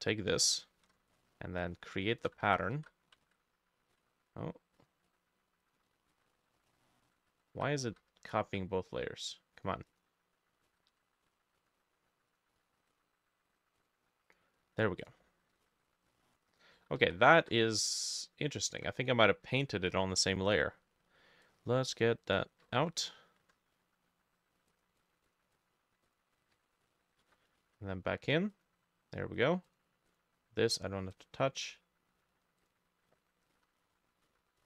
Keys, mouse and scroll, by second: 0.5-6.6 ctrl+drag, 0.5-2.8 ctrl+middle drag, 0.8 ctrl+j, 2.5 ctrl+z, 2.5 j, 2.8 ctrl+z, 3.3 ctrl+z, 4.0 ctrl+z, 6.1 ctrl+,, 6.2 ctrl+j, 7.3 ctrl+z, 7.5 ctrl+z, 7.9 ctrl+z, 10.7 ctrl+z, 15.7 ctrl+j, 16.8 ctrl+z, 17.0 ctrl+z, 17.4 ctrl+z, 18.5 ctrl+middle click, 22.6 ctrl+middle click, 22.7 ctrl+x, 23.4 ctrl+middle click, 25.0 double click, 25.3 double click, 25.6 double click, 26.6 ctrl+x, 27.3 ctrl+v, 27.6 ctrl+shift+a, 29.7 double click, 30.1 double click, 33.6-34.6 drag, 33.6 t, 33.9 ctrl+middle click, 34.3 ctrl+,.